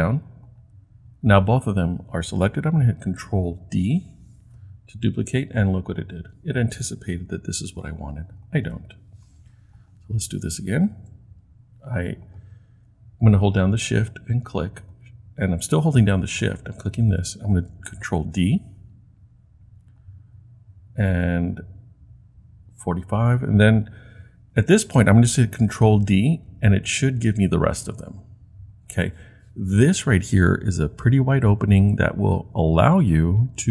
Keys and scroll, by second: 3.7 super+d, 8.7 Delete, 18.2 super+d, 26.4 super+d, 27.3 super+d.